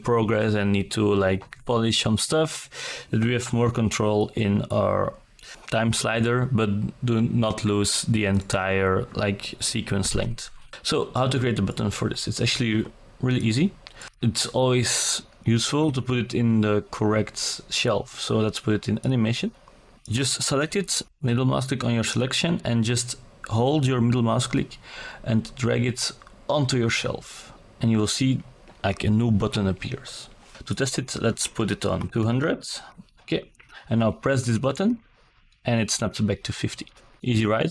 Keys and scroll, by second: 17.4 ctrl+z, 28.5 KP_2, 28.7 KP_0, 29.1 Return.